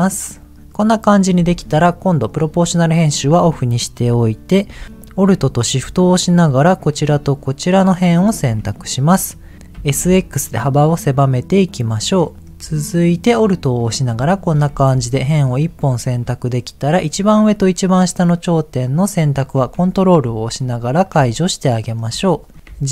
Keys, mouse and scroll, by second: 0.2 middle click, 0.7 middle click, 2.2 click, 4.8 click, 5.4 alt+click, 6.5 alt+shift+click, 7.2-8.2 middle drag, 8.2-9.1 scroll up 3, 9.1 middle click, 9.5 right click, 9.7 s, 10.0 x, 11.8 click, 12.3 alt+middle click, 13.3 alt+click, 15.1 shift+middle click, 17.8 middle click, 18.9 ctrl+click, 19.8 shift+middle click, 20.6 ctrl+click, 21.3 middle click, 22.2 shift+middle click, 22.6 g.